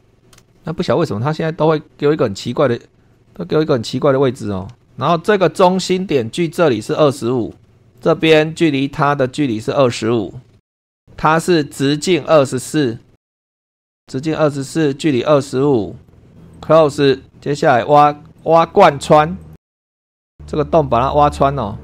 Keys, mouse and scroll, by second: 0.1 scroll down 2, 0.5 shift+middle click, 2.5 click, 3.1 click, 7.3 super+2, 7.6 Escape, 7.7 super+scroll up 1, 7.9 click, 9.4 click, 10.3-11.1 typing, 13.1 super+2, 13.4 r, 13.6 /, 13.8 Return, 14.9 click, 16.0 click, 16.5 click, 18.4 click, 19.4 click, 19.8 click, 20.2-21.8 middle drag.